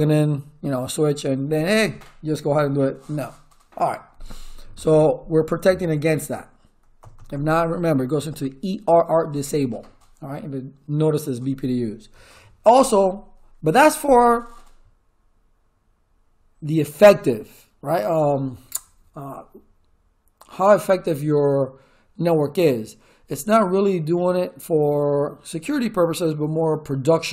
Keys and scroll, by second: 7.0 Return.